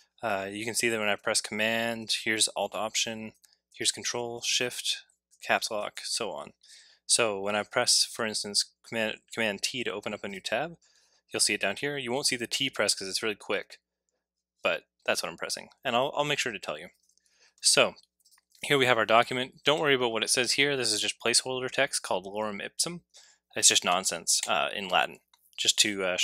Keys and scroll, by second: 5.2 Caps_Lock.